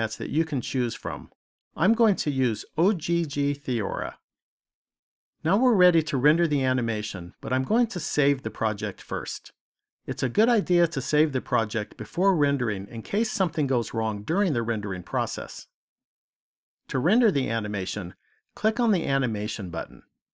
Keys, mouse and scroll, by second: 9.7 click, 17.6 click.